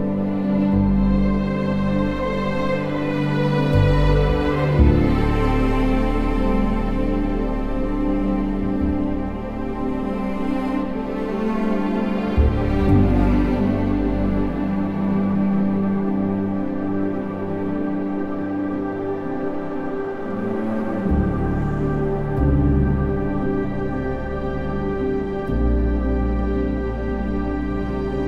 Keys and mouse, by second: 1.5 n, 1.9 n, 4.1 click, 5.3 drag, 7.3 r, 7.7 z, 10.0 g, 10.4 x, 14.0 shift+click, 14.5 r, 14.8 z, 16.9 KP_3, 19.4 2, 20.8 s, 22.2 click.